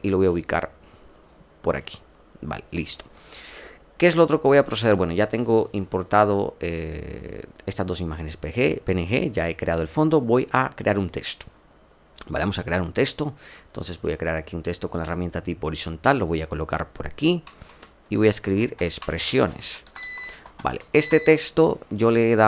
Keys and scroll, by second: 18.3-21.2 typing.